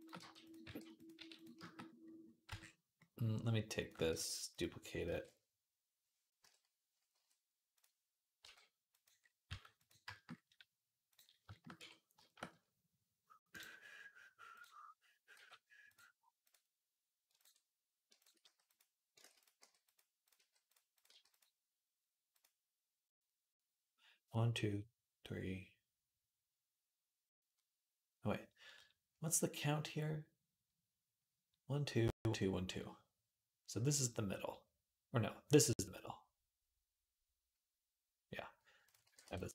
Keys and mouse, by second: 0.0 g, 0.5 r, 1.0 s, 2.3 Tab, 2.3-3.6 middle drag, 3.6 click, 3.7-11.3 shift+middle drag, 4.0 shift+d, 4.9 alt+r, 6.3 KP_7, 7.0 g, 8.2 g, 9.3 g, 11.3-20.5 shift+drag, 11.6 Tab, 15.2 g, 18.4 s, 19.1 ctrl+z, 19.4 g, 20.2 g, 20.9 g, 38.9 g.